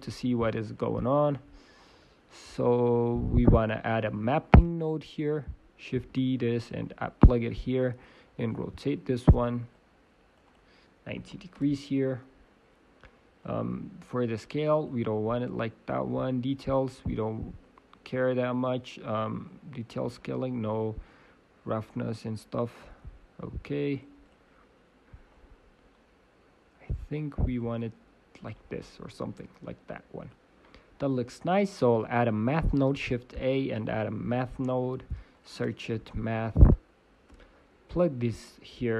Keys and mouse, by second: 6.1 shift+d, 9.2 click, 12.4 middle click, 13.4 click, 15.1 click, 15.4 middle click, 20.5-23.0 middle drag, 25.5-27.3 middle drag.